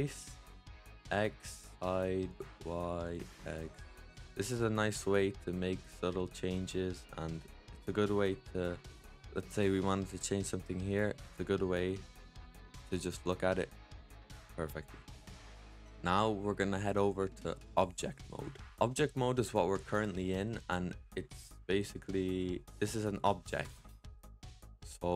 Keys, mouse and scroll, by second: 0.7 click, 2.2 click, 2.9 click, 3.8-6.8 middle drag, 8.0 middle click, 8.9 click, 13.5-14.2 scroll up 4, 15.5 scroll down 2, 20.7-25.1 middle drag.